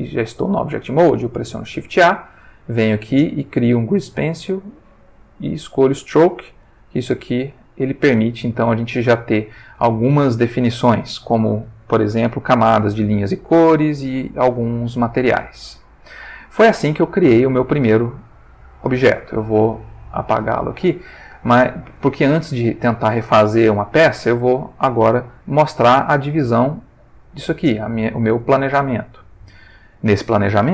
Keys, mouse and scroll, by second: 0.4 click, 1.4 shift+a, 5.7 click, 6.7 g, 7.8 click, 12.1 click, 13.8 click, 16.0 click, 19.4 x, 19.8 click, 22.4 ctrl+shift+middle click, 23.9-25.4 ctrl+middle drag, 26.6 click, 27.6 click, 28.6 ctrl+middle click, 29.2-30.3 ctrl+shift+middle drag.